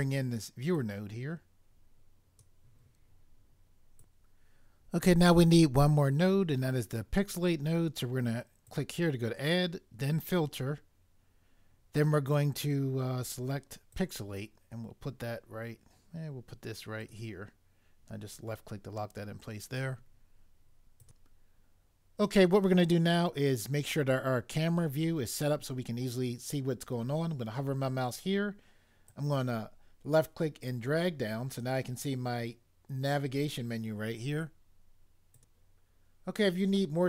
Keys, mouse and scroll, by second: 0.7 click, 4.0 click, 8.6 click, 13.9 click, 17.0 click, 21.0 click, 21.0 click, 29.1 click, 35.3 click, 35.7 click.